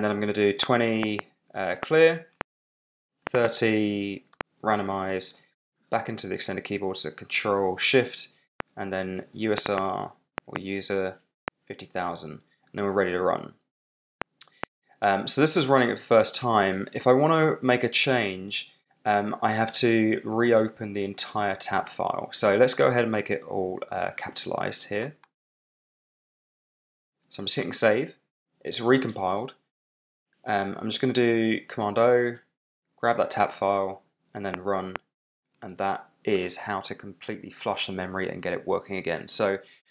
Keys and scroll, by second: 0.6 2, 0.9 0, 1.1 space, 1.7 v, 2.3 Return, 3.0-4.3 typing, 8.5-10.1 typing, 11.4 Return, 14.1 r, 14.5 Return.